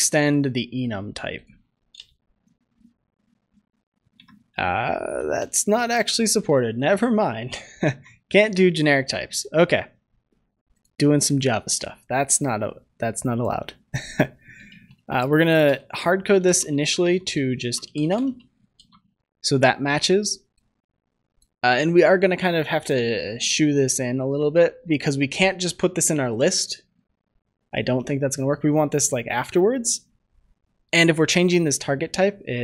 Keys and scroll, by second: 1.8 alt+Return, 5.6 Delete, 6.0 Delete, 6.2 Delete, 6.4 Delete, 6.6 Delete, 6.8 Delete, 7.7 ctrl+s, 18.7 ctrl+s.